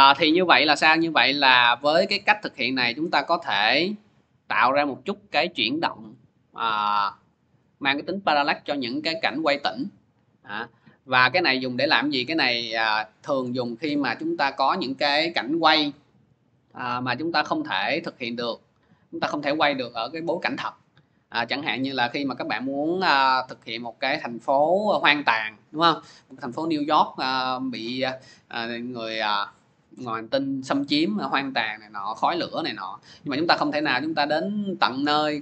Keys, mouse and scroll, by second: 13.2-18.4 drag.